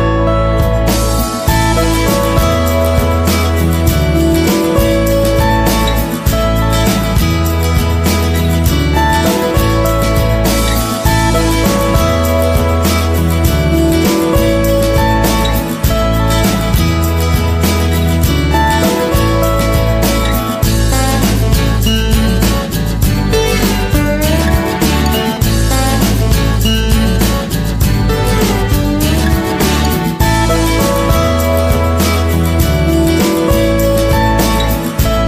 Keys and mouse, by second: 0.4 g, 2.9 middle click, 3.7 right click, 4.5 alt+z, 4.8 g, 6.0 middle click, 7.1 right click, 7.8 g, 8.6 middle click, 10.1 ctrl+l, 10.8 alt+z, 11.3 s, 12.3 alt+z, 13.5 z, 14.4 g, 15.6-16.6 middle drag, 17.0 KP_7, 18.1 alt+z, 19.1 shift+middle click, 19.6 g, 21.0 r, 21.8 shift+d, 22.6 r, 23.4 g, 25.1 shift+d, 26.1 r, 27.1 g, 27.6 alt+z, 27.8 middle click, 29.7 Tab, 29.8 middle drag, 30.6-31.3 middle drag, 31.4 KP_3, 32.1 Tab, 32.7 g, 33.4 middle click, 34.1 Tab, 34.4 Tab, 34.8 right click.